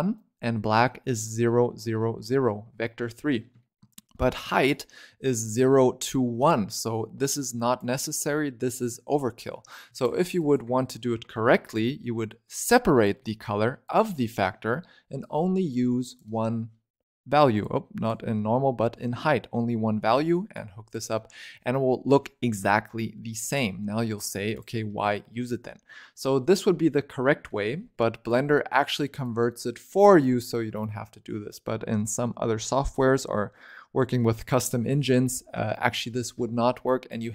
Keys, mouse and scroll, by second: 2.3-3.4 scroll down 3, 3.5 shift+middle click, 3.8-4.2 scroll up 1, 4.2-6.3 shift+middle drag, 6.3 click, 7.2 click, 9.4 scroll down 5, 9.5 middle click, 9.8 ctrl+right click, 10.3 click, 10.6 shift+a, 13.1 scroll up 3, 13.7 click, 15.1 click, 17.5 click, 18.3-19.8 scroll up 4, 19.8 middle click, 20.4 click, 21.1-23.2 drag, 23.2-23.7 scroll down 4, 23.7 middle click, 24.0-24.4 scroll down 1, 24.4 click, 26.0-27.2 scroll down 2, 27.2 scroll up 4, 27.4 middle click, 28.2 click, 29.1 click, 35.6 click.